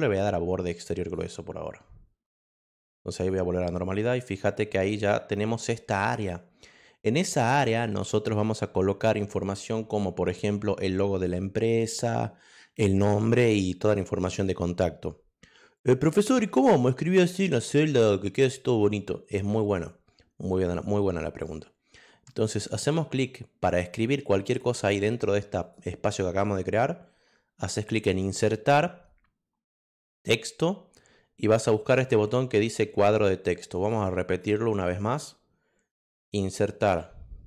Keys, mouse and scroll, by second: 1.0 click, 4.0 click, 4.4 click, 4.9 click, 7.9 click, 25.6 click, 27.8 click, 30.1 click, 36.3 click.